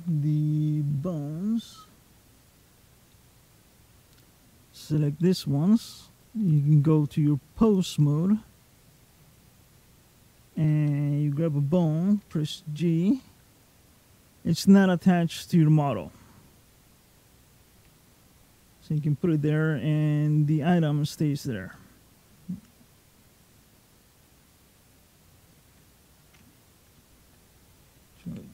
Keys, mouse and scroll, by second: 2.3 click, 2.9 middle click, 3.9 click, 5.0 middle click, 6.3 click, 8.8 click, 12.0 g, 17.6 g, 18.8 middle click, 21.5 middle click, 28.1 alt+f.